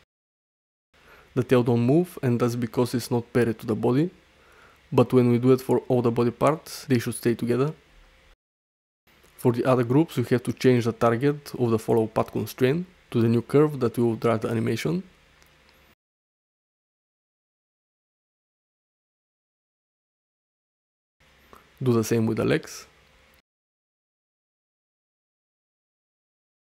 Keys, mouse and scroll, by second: 2.3 middle drag, 3.1 shift+middle drag, 3.8 shift+middle drag, 4.8 drag, 6.3 ctrl+p, 7.6 g, 8.0 x, 10.1 click, 10.2 middle click, 10.3 click, 11.3 shift+middle drag, 15.6 shift+middle click, 15.9 middle click, 17.8 click, 19.6 shift+middle click, 19.9 middle click, 22.4 click, 24.7 click, 26.0 click.